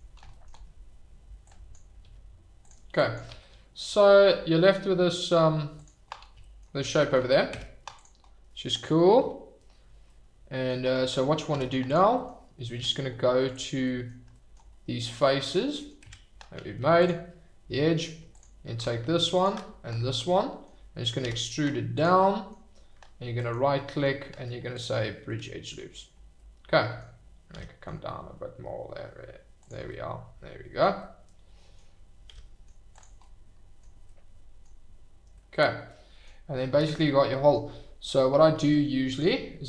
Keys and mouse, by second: 1.4 click, 2.0 g, 2.6 click, 3.1 click, 3.2 g, 5.2 g, 5.7 click, 7.5 Tab, 10.0-10.7 middle drag, 11.5 Tab, 12.0 shift+middle drag, 12.7 Tab, 13.8 drag, 15.4 shift+click, 15.7 drag, 16.0 Tab, 20.2 click, 21.2 e, 21.3 click, 21.9 click, 22.3 click, 23.5-24.8 drag, 25.3 middle click, 26.3 middle click, 27.5 g, 29.6 click, 29.9-31.8 middle drag, 32.2 g, 32.3 middle click, 32.9 click, 33.3-34.0 middle drag, 34.1-34.7 middle drag, 35.4-36.3 drag, 37.4 click, 38.5 ctrl+r.